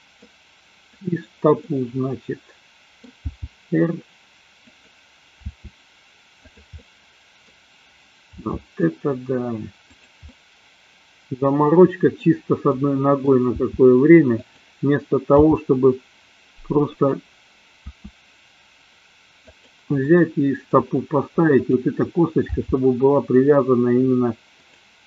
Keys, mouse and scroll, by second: 0.9 click, 1.7-3.2 middle drag, 3.4 g, 4.8 click, 5.4 r, 6.8 middle click, 10.4-12.2 middle drag, 12.7 middle click, 13.7 r, 14.5 click, 15.4 g, 17.0 click, 17.9 r, 20.0-20.8 middle drag, 20.8 drag, 21.5 click, 22.4 g, 24.7 drag.